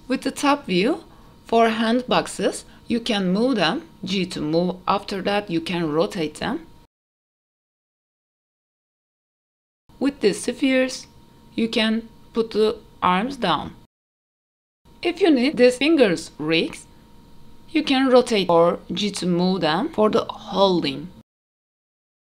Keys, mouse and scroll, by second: 0.1 click, 0.3 middle drag, 0.7-1.1 scroll down 1, 1.1 KP_7, 1.4 g, 2.7 r, 3.8-4.1 scroll up 2, 4.0 middle click, 4.3-9.3 typing, 4.7 middle drag, 4.8 scroll down 1, 4.8 shift+middle click, 5.1 shift+middle drag, 5.7 middle click, 5.9 middle click, 6.0 click, 6.2 shift+click, 6.5 ctrl+s, 6.5 shift+middle click, 6.5 click, 8.6 click, 8.7 middle click, 9.8 click, 10.4 click, 10.7 g, 11.7 middle click, 11.9 click, 12.3 KP_3, 12.5 g, 13.8 middle click, 14.1 scroll up 3, 14.2 middle click, 14.4 click, 14.8 KP_7, 14.8 g, 15.5 r, 15.7 shift+click, 16.1-17.2 middle drag, 18.1 KP_3, 19.5 r, 20.9 scroll up 2, 21.3 shift+middle click, 21.8 shift+click.